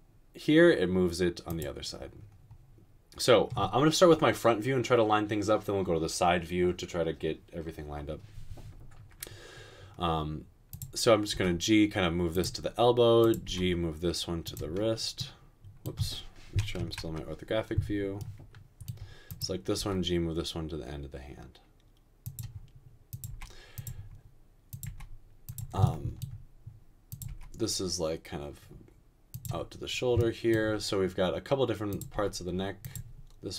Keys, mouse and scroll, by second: 11.4 typing, 13.4 typing, 16.8 typing, 19.8 typing, 23.3 typing, 24.8 typing, 27.3 typing, 32.2 g.